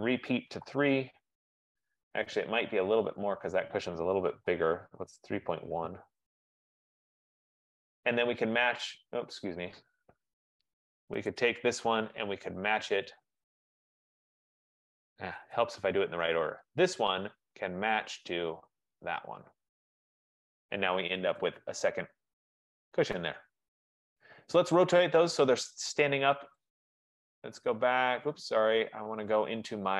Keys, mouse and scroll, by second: 0.7 3, 0.9 Tab, 2.0 F15, 3.2 click, 4.5-5.5 typing, 5.8 Tab, 9.0 click, 10.6 Escape, 10.7 Escape, 10.9 Escape, 11.7 click, 13.4 click, 14.5 right click, 15.6 Escape, 15.9 Escape, 16.7 click, 18.1 click, 19.2 click, 20.1 click, 21.6 right click, 21.8 middle click, 21.9 middle click, 22.5 middle click, 22.7 middle click, 22.9 middle click, 23.2 middle click, 24.5-26.2 scroll down 7, 26.7 click, 27.7 click, 28.0 click, 29.5 click.